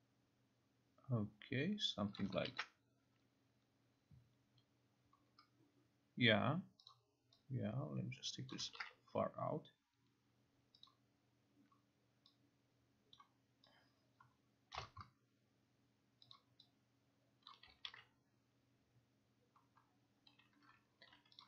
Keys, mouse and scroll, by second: 2.2 click, 2.5 ctrl+r, 7.0 click, 8.6 click, 8.9 ctrl+r, 10.9 click, 13.3 click, 14.8 click, 14.9 click, 16.4 click, 17.5 click, 17.9 ctrl+r.